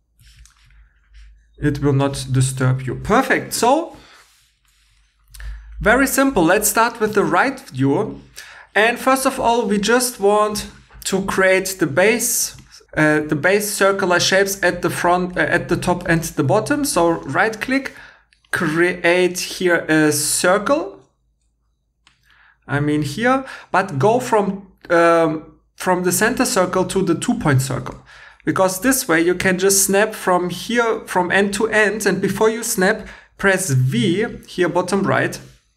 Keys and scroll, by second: 22.0 Escape.